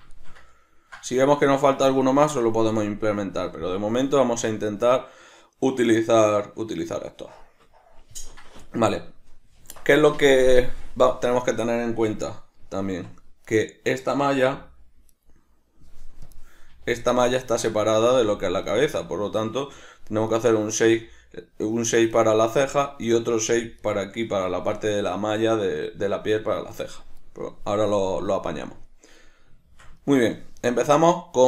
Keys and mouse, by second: 13.4 right click, 14.5 g, 15.2 right click, 16.2 drag, 16.7 g, 17.9 right click, 18.1 g, 18.8 right click, 20.3 right click, 20.9 g, 22.2 right click, 23.0 right click, 23.4 g, 23.9 right click, 29.6-31.4 shift+middle drag.